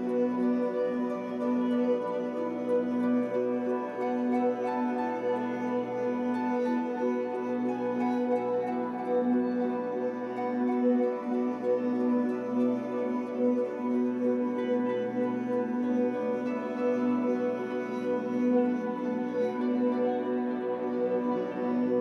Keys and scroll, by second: 0.0 Escape, 2.1 w, 2.9 Escape, 3.1 3, 3.7 w, 6.6 Escape.